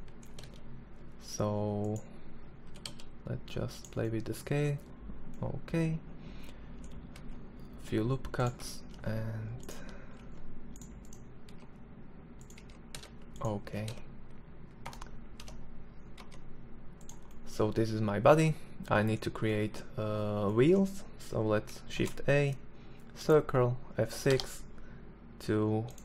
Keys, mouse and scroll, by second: 2.2 s, 6.6 ctrl+r, 8.4 ctrl+r, 9.7 ctrl+Tab, 11.0 e, 12.0 g, 13.1 r, 14.8 r, 16.8-22.8 middle drag, 21.4 shift+a, 23.7 F6.